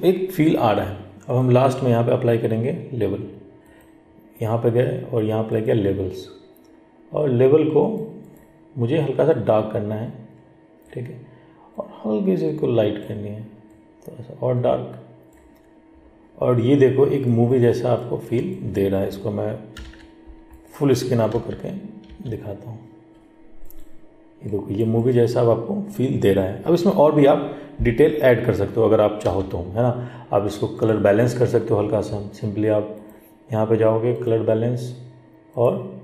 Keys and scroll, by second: 19.9 ctrl+h.